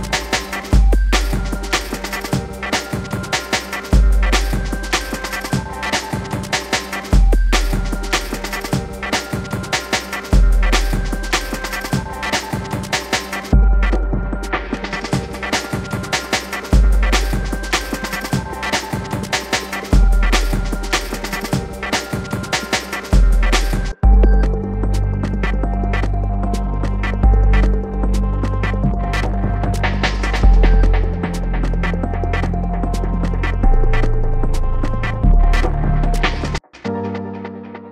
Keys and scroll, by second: 20.7 BackSpace.